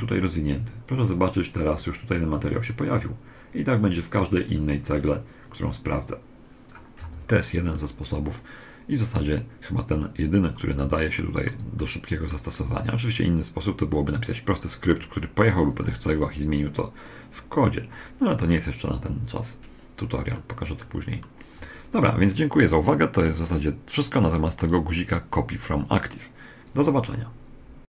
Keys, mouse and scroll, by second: 1.5 click, 3.4 middle click, 4.2-6.8 drag, 6.7 a, 7.5-9.4 middle drag, 10.1-14.3 middle drag, 14.9-16.9 middle drag, 18.3-20.1 middle drag, 20.5-22.5 middle drag.